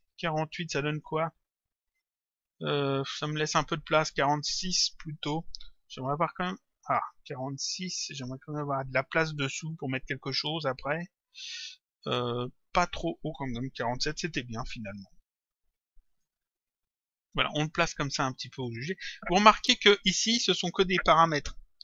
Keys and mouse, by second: 1.0 click, 4.1 click, 7.8 BackSpace, 9.6 click, 13.0 click, 14.4 Return, 16.1 click, 18.5 click.